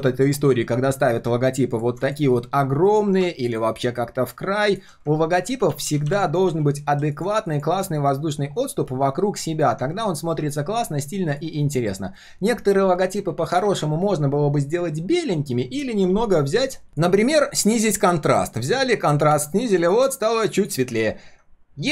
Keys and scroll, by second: 5.3 ctrl+z, 5.5 ctrl+z, 5.6 ctrl+z, 5.8 ctrl+z.